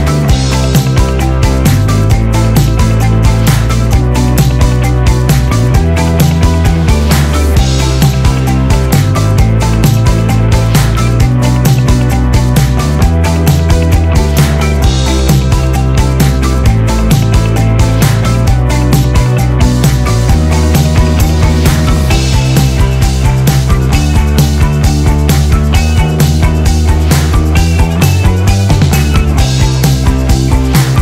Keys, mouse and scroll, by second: 1.1 click, 2.3-3.7 typing, 4.2 scroll, 4.7-8.8 middle drag, 8.8 click, 22.0-23.7 drag, 25.4-27.2 scroll down 1, 28.9 click.